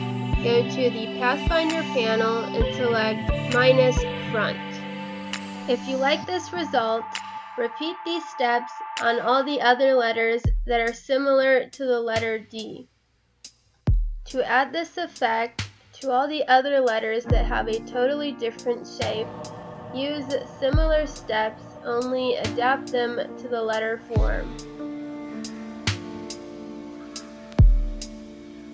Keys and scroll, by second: 2.0 ctrl+f, 2.6 Delete, 5.0 Delete, 5.3 space, 6.2 c, 7.1 Delete, 8.1 ctrl+f, 8.4 space, 11.2 Delete, 13.2 space, 14.6 ctrl+f, 15.1 ctrl+f, 20.1 Delete, 20.6 ctrl+f, 21.0 ctrl+f, 21.2 Right, 23.1 ctrl+f, 26.5 ctrl+z.